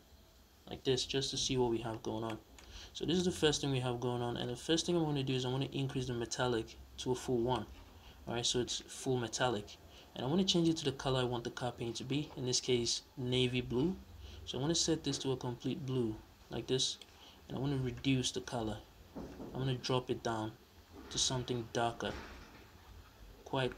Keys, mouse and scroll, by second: 1.7 scroll up 2, 2.0-5.7 middle drag, 2.5 scroll down 1, 3.3 scroll up 1, 3.8-5.7 scroll up 1, 5.7-10.6 drag.